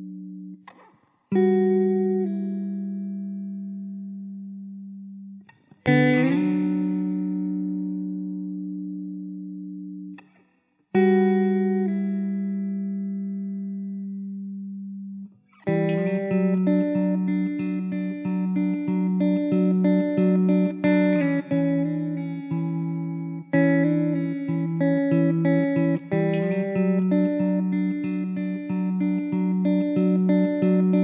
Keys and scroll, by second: 0.2 f, 1.1 Tab, 1.6 s, 5.2 r, 7.5 r, 12.3 Tab, 13.2 `, 18.0 KP_0, 21.3 KP_0, 23.1 shift+d.